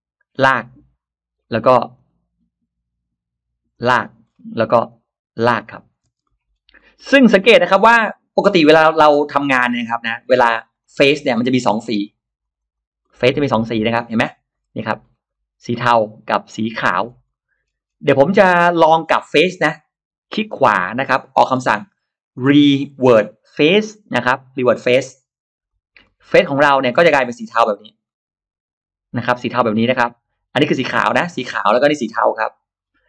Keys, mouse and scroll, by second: 0.2 click, 1.2 scroll up 2, 1.8 click, 3.6 click, 3.8-4.1 scroll down 1, 4.1 scroll up 1, 4.7 click, 5.4 click, 6.0 space, 6.1 middle click, 6.4 scroll down 1, 6.9 middle click, 7.2 scroll up 2, 7.5-9.9 middle drag, 9.9-10.2 scroll down 1, 10.5 click, 10.6 click, 10.8 click, 11.1-11.4 scroll up 1, 11.5 click, 11.7 click, 11.9 click, 12.3 click, 12.4 click, 12.7 click, 12.9 scroll up 1, 13.3 middle click, 14.6-15.8 scroll up 5, 15.8 middle click, 16.6-17.3 scroll down 4, 17.1 middle click, 17.6-18.0 scroll up 2, 18.0 click, 18.3 middle click, 18.7 middle click, 19.5 middle drag, 20.3 right click, 24.9 click, 25.5 click, 25.8-26.1 scroll down 2, 26.7 click, 27.0-27.3 scroll down 2, 27.4 click, 27.9 scroll up 2, 30.3 click, 31.1 click, 31.9 click, 32.6-32.9 scroll down 1.